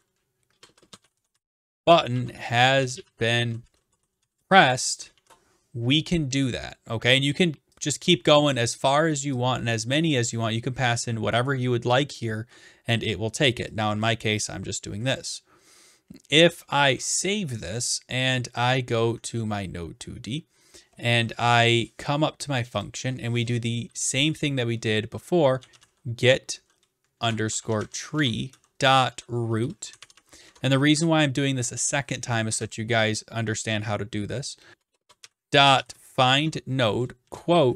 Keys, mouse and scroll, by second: 0.0-1.5 typing, 3.3-4.9 typing, 7.9-8.9 drag, 10.3 click, 11.5 click, 14.0-15.2 drag, 16.8 ctrl+s, 19.4-20.5 drag, 22.8-23.9 drag, 25.3-30.6 typing, 34.7 BackSpace, 34.9 BackSpace, 35.0 BackSpace.